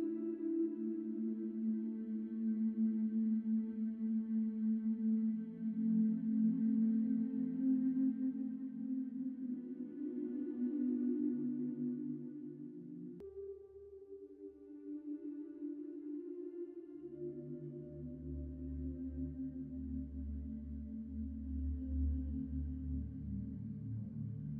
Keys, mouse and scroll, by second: 1.3-1.9 typing, 7.1 shift+0, 8.9-9.3 typing, 13.1-15.3 typing, 17.7-19.8 typing, 22.6 shift+0.